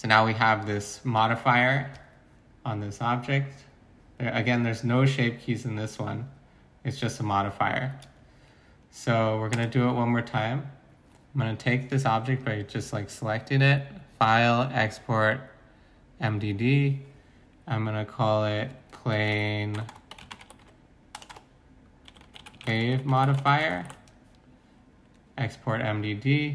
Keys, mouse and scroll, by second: 19.1-24.3 typing.